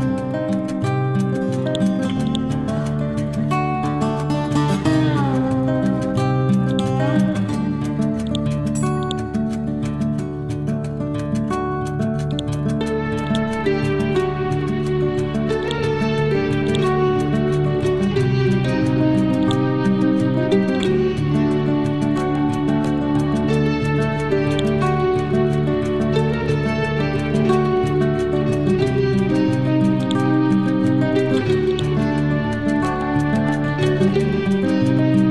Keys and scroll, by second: 25.9 Down, 26.4 Left, 27.6 Down, 32.1 Up.